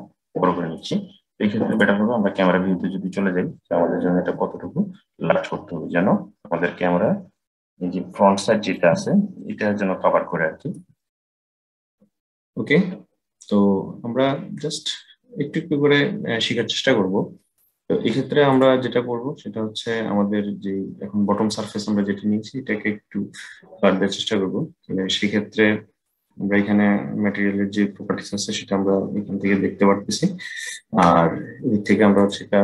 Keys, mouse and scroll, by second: 1.6 click, 4.0 s, 10.6 s, 18.2 click, 31.9-32.6 drag.